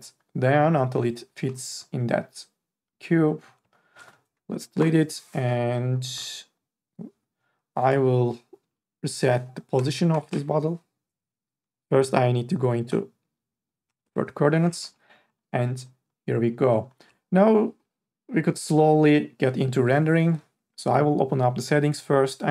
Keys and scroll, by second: 1.4 e, 4.8 Delete, 9.7 KP_0, 10.3 Return, 13.9 KP_0, 14.1 Return.